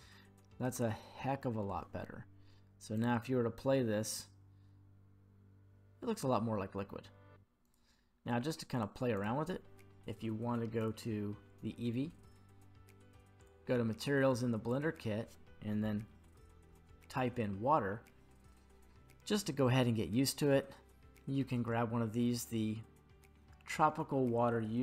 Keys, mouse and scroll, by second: 2.9 click, 7.6 click, 8.7 click, 9.1 click, 10.8 click, 13.4 click, 14.6-16.9 drag.